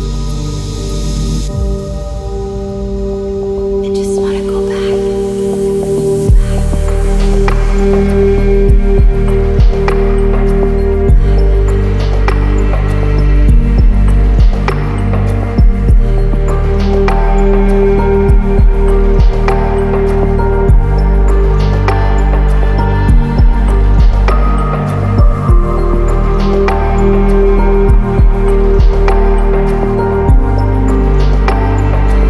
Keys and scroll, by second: 12.8 ctrl+z, 26.5 ctrl+z, 27.4 ctrl++.